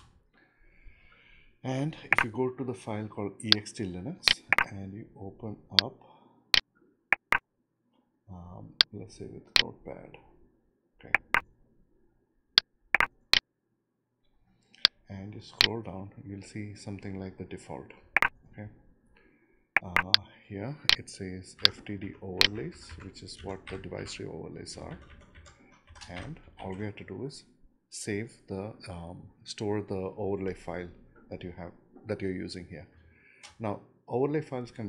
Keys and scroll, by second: 1.0 Return, 22.7 Home, 23.1 Right, 24.4 Left, 24.8 Delete, 26.0 ctrl+shift+Left, 26.9 shift+Left, 27.3 Delete, 27.7 ctrl+v.